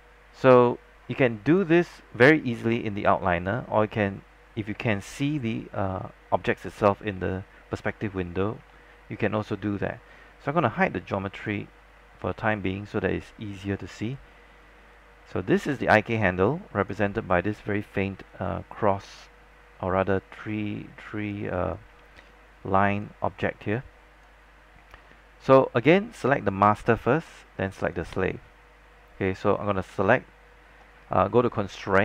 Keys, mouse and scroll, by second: 5.3 scroll up 1, 7.4 alt+middle click, 8.8 alt+middle click, 11.5 click, 12.4 scroll down 1, 12.7-14.3 alt+drag, 14.4 scroll up 1, 15.8 click, 18.3-21.4 alt+drag, 21.8 alt+click, 23.8 alt+click, 24.9 scroll down 1, 26.4 click.